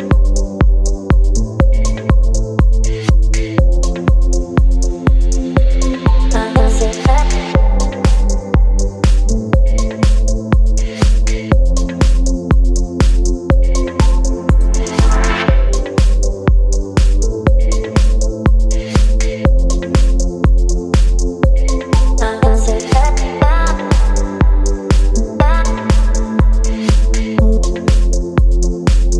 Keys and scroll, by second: 1.7 v, 6.3 Return, 12.5 space, 18.7 Return, 25.2 Return.